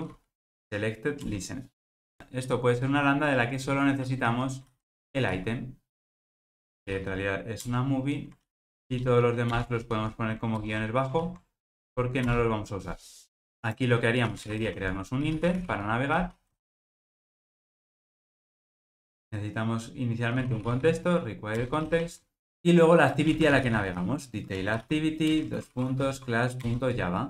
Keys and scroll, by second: 1.3 Return, 5.0 alt+shift+Right, 17.9 Return, 21.7 Return, 25.4 Return.